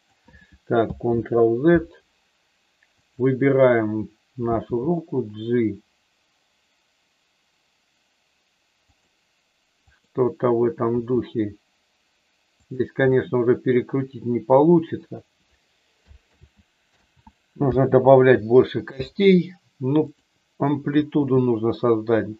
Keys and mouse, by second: 1.2 ctrl+z, 2.9 click, 4.7 g, 8.9 click, 9.8 click, 10.8 r, 12.5 click, 13.1-14.9 middle drag, 16.3 ctrl+z, 17.1 ctrl+z, 19.9 click, 21.1 g.